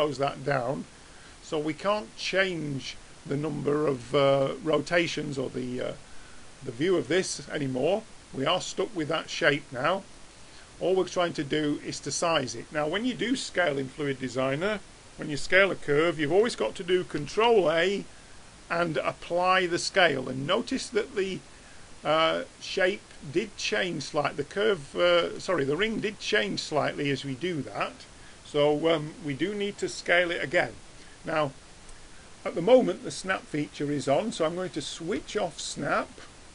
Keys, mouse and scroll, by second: 4.0-9.1 middle drag, 9.1-10.9 drag, 17.2 ctrl+a, 23.5-25.4 middle drag, 25.7 middle click, 26.0-35.2 middle drag, 35.2-36.5 drag.